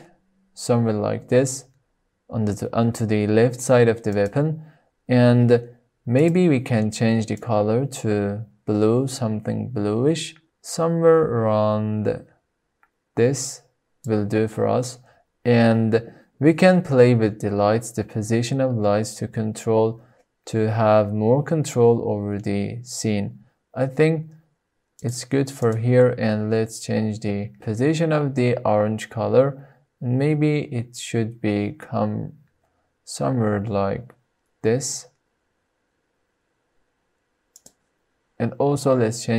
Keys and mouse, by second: 4.2-5.3 drag, 6.2 click, 17.1 g, 25.1 click, 25.5-25.8 drag, 26.2 g, 37.9 click, 38.9 drag.